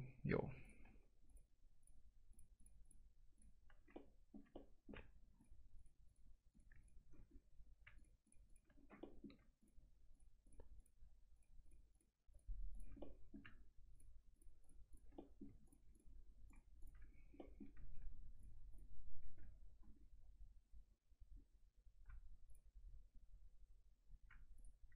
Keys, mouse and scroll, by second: 3.9 alt+middle click, 4.5 middle click, 5.4 ctrl+click, 7.3 scroll up 1, 8.0 ctrl+click, 8.8 scroll down 1, 9.0 middle click, 9.6 ctrl+click, 13.0 middle click, 13.9 ctrl+click, 15.1 middle click, 15.7 ctrl+click, 17.1-17.4 scroll down 1, 17.4 middle click, 18.4 ctrl+click, 20.0 scroll up 1, 22.5 ctrl+click, 23.1 scroll down 1, 24.5 ctrl+click.